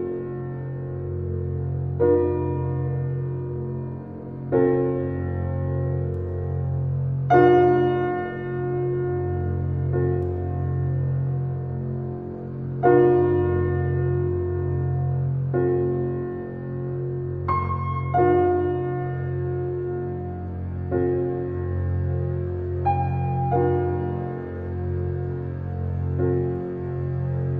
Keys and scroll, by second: 1.3 shift+space.